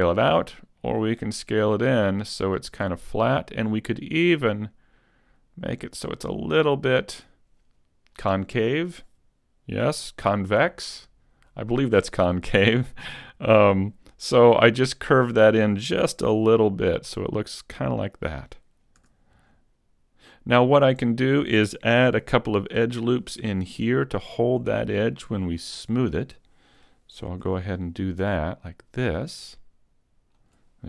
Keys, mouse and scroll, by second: 16.3 z, 16.7 middle click, 18.3-19.0 scroll down 2, 19.0-20.0 scroll down 3, 19.0 a, 19.8 middle click, 20.3-22.9 scroll up 3, 22.9 ctrl+r, 26.1 click, 27.3 ctrl+r, 30.5 click.